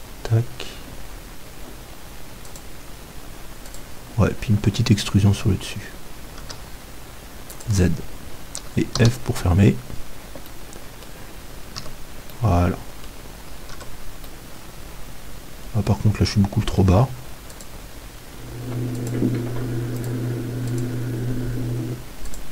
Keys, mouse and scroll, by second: 5.4-7.6 middle drag, 5.4 e, 7.6-9.5 drag, 9.2 f, 10.5-15.0 middle drag, 11.7 z, 13.8 Tab, 15.7 middle click.